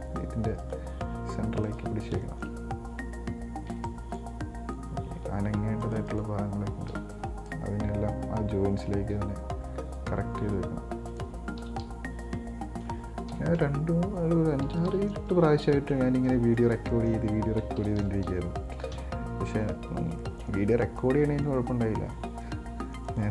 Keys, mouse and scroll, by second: 0.9 right click, 1.3 g, 2.3 scroll down 3, 2.5 shift+middle click, 3.2-4.0 scroll up 2, 4.0 b, 5.3 g, 6.3 right click, 7.2 b, 9.4 g, 11.8 KP_1, 12.1 KP_3, 13.6 KP_8, 13.8 KP_7, 14.9 KP_1, 15.1 KP_3, 16.3 scroll down 3, 16.5 middle click, 17.0 scroll up 2, 17.2 middle click, 18.0 KP_1, 18.2 KP_3, 19.2 KP_9, 20.0-20.4 scroll up 3, 20.4 shift+middle click, 21.0 scroll down 1, 21.2-23.3 middle drag.